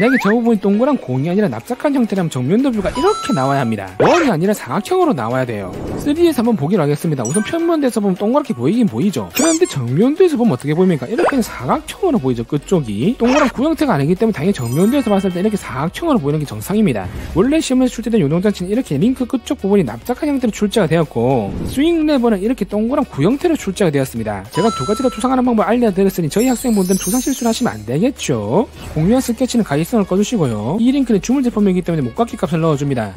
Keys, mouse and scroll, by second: 8.3 alt+w, 10.4 click, 14.6 alt+q.